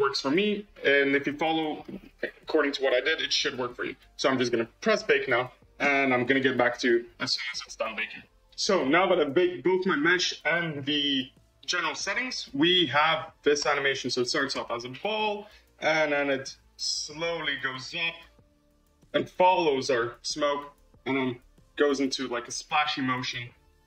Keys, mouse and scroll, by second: 0.1-0.6 scroll down 3, 0.6-4.2 scroll up 21, 4.7-8.4 drag, 9.3-11.9 scroll up 19, 11.9-12.7 middle drag, 12.7 space, 13.7 space, 14.0-14.4 drag, 14.4 space, 21.3-23.6 drag.